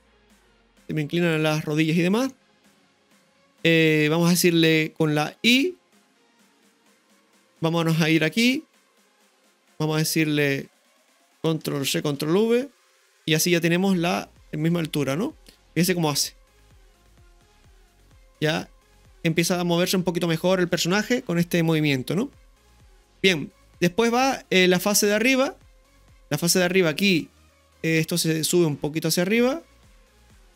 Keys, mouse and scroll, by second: 2.3 shift+middle click, 5.4 shift+middle click, 5.5 i, 8.3-10.5 drag, 11.0 right click, 11.8 ctrl+c, 12.2 ctrl+v, 13.8-15.8 drag, 15.9 space, 24.0-27.1 drag, 24.0 space, 26.1 space, 29.1-30.5 drag.